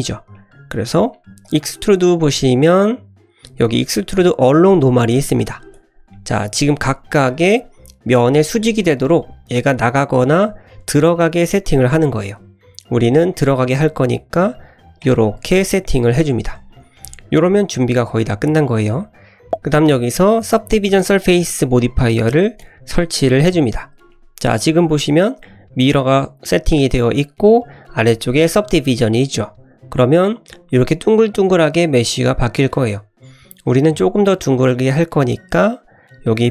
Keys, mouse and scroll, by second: 0.1 scroll up 1, 0.4 middle click, 0.6 scroll down 1, 1.5-5.8 drag, 6.1 middle click, 7.3 middle click, 9.1-15.1 drag, 15.1-15.7 middle drag, 16.0 scroll up 1, 16.2 Tab, 16.5-17.0 scroll down 3, 17.0 middle click, 17.8-18.8 middle drag, 19.0-19.4 scroll up 1, 19.4-19.9 scroll down 1, 20.0 middle click, 21.2-22.8 drag, 24.5 click, 25.0 click, 29.1-29.8 middle drag, 30.0 scroll down 1, 31.6 scroll up 1, 31.8-32.7 middle drag, 33.7 click.